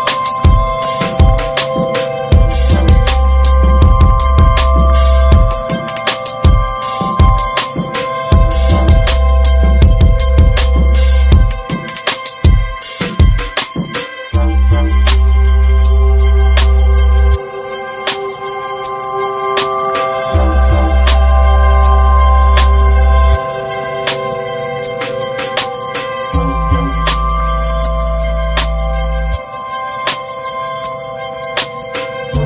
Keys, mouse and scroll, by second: 0.4 click, 1.3 click, 1.6 Tab, 2.7 Tab, 3.0 click, 3.3 click, 3.7 Tab, 3.9 alt+middle click, 4.1 alt+z, 4.5 shift+middle click, 4.6 scroll up 3, 7.3 shift+middle click, 7.4 scroll up 1, 7.6-9.1 middle drag, 9.1 click, 9.5 alt+z, 9.8 alt+middle click, 10.1 scroll down 3, 10.4 click, 11.9 click, 12.1 alt+z, 12.4-13.3 scroll up 4, 12.5 middle click, 13.1 shift+middle click, 13.5 middle click, 14.4 scroll up 2, 14.7 middle click, 15.4 3, 15.6 click, 16.5 ctrl+z, 16.8 alt+shift+click, 17.1 alt+z, 17.3 scroll down 5, 17.5 middle click, 18.0 alt+z, 18.7 click, 18.8 scroll down 4, 19.0-22.0 shift+middle drag, 22.0-26.9 drag, 26.9 Tab, 27.0 click, 27.2 scroll down 2, 27.4-27.9 shift+middle drag, 27.9 scroll up 1, 28.1 ctrl+s, 28.3 middle drag, 28.5 scroll up 3, 29.0 Tab, 29.1 click, 29.6 l, 31.1-32.4 drag.